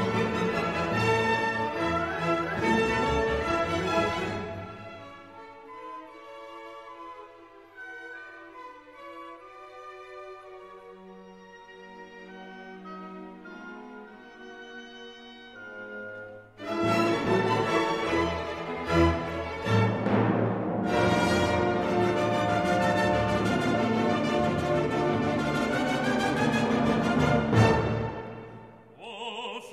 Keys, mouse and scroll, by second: 1.2 click, 2.1 click, 5.8-7.3 drag, 7.7 click, 9.3 1, 9.7 5, 10.7-11.8 drag, 13.2 click, 14.2 0, 15.0-16.5 drag, 16.7-17.1 scroll down 1, 17.6-18.6 drag, 19.1 click, 21.1 click, 23.1 click, 25.5 click, 26.4 1, 26.9 5, 27.6 click, 28.4 1, 28.9 0, 29.5 click.